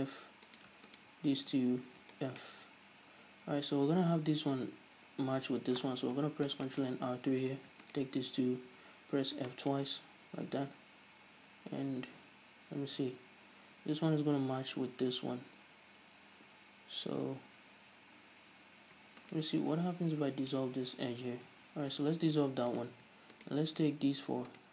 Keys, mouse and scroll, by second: 0.7 right click, 1.1 shift+right click, 1.9 f, 2.4-7.1 shift+middle drag, 2.8-3.4 scroll up 2, 3.4-6.3 scroll up 1, 6.3 ctrl+r, 7.1 right click, 7.7-8.7 right drag, 8.9 f, 9.8-12.6 shift+middle drag, 12.4 z, 16.0-19.4 scroll up 1, 19.5 alt+right click, 19.8 x, 21.9 ctrl+z, 23.0-23.7 right drag, 24.1 shift+right click.